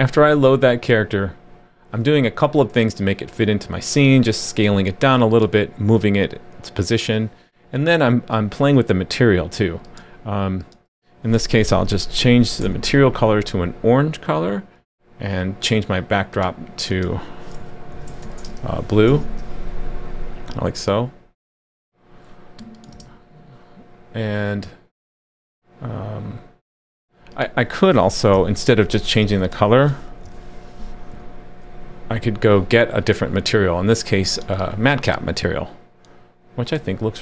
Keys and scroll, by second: 11.6 super+/, 12.6 super+s, 19.1 super+s, 28.3 super+/, 30.2 super+/, 31.1 super+s.